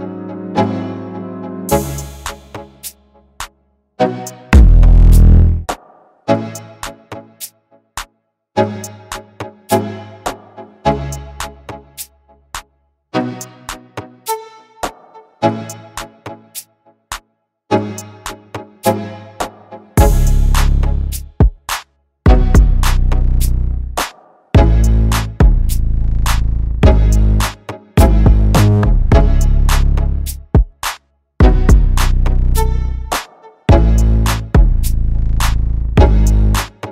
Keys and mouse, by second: 1.5 shift+Tab, 1.8 click, 4.4 shift+Tab, 4.9 click, 6.6 click, 10.7 click, 12.6 click, 13.5 shift+Tab, 13.8 click, 24.2 click, 25.7 click, 28.3-32.5 drag, 33.5 click, 36.2-36.9 drag.